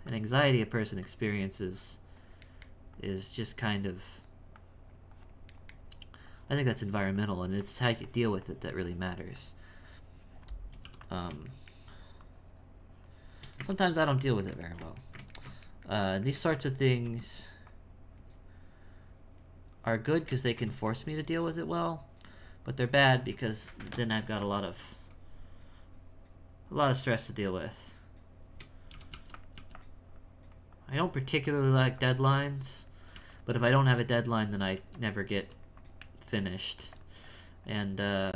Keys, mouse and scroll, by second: 2.5 shift+middle click, 2.9-5.6 shift+drag, 5.6 shift+middle click, 6.3-10.8 shift+drag, 11.5 shift+middle click, 12.2-13.7 shift+drag, 13.7-17.7 ctrl+middle drag, 17.7-20.4 shift+drag, 20.4 ctrl+z, 20.9-23.9 shift+drag, 24.7 ctrl+middle click, 25.0 space, 28.4-29.5 typing, 30.1-31.8 drag, 31.8 f, 32.4 click, 33.1 f, 33.5-34.7 drag, 34.7 f, 35.3 f, 35.8-36.8 drag, 36.8 f, 37.2-38.3 drag.